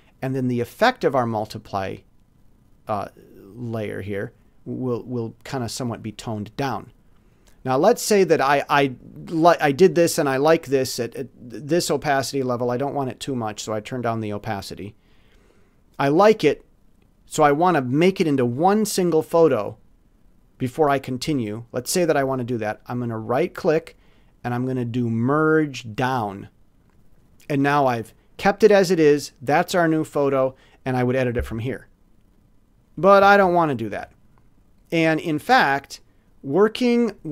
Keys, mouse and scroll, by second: 0.4-1.6 scroll up 1, 4.0 scroll down 1, 4.2 scroll up 1, 5.8-6.4 scroll down 1, 6.9-8.8 drag, 12.6-15.7 drag, 23.3 right click, 26.8 click, 32.3 click, 33.4 ctrl+z, 36.0 ctrl+click, 36.9 click.